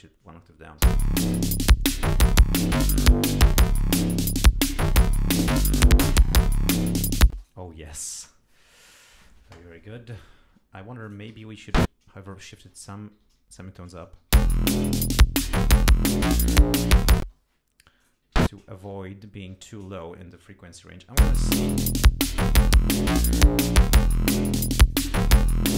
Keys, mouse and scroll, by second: 0.8 l, 6.0 click, 7.3 space, 7.4 right click, 10.1 click, 11.0 click, 11.3 e, 11.7 ctrl+a, 12.9 shift+Up, 14.2 shift+Home, 14.4 shift+space, 17.2 space, 18.3 ctrl+a, 18.9 ctrl+shift+Up, 19.5 ctrl+shift+Down, 20.6 Home, 21.2 space, 22.5 right click, 24.8 click.